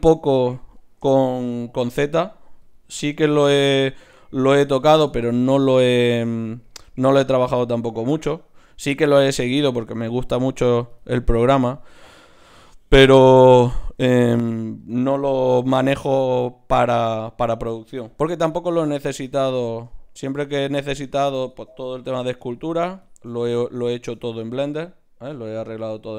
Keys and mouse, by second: 0.7-2.6 drag, 1.9 g, 2.9 click, 3.2 g, 4.7-7.4 drag, 6.2 g, 7.2 g, 7.4-12.2 right drag, 8.8 g, 10.2-14.8 drag, 13.8 ctrl+Tab, 15.5-16.4 typing, 17.0 Tab, 18.1 f, 18.5-20.4 drag, 19.4 Tab, 20.4 Tab, 20.9-23.8 drag, 22.0 f, 23.4 Tab, 24.7 Tab.